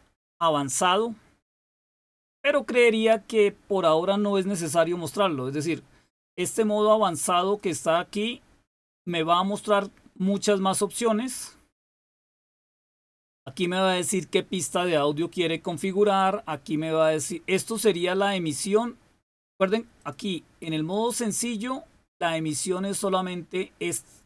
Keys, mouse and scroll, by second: 7.5 click, 18.2 click, 19.9 click, 20.9 click.